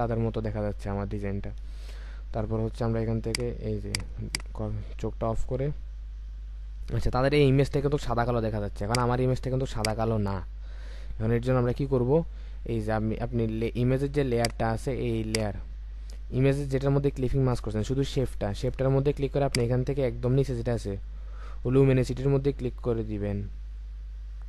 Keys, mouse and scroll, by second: 1.8-4.1 alt+scroll up 1, 4.3 double click, 5.5-6.4 alt+scroll down 1.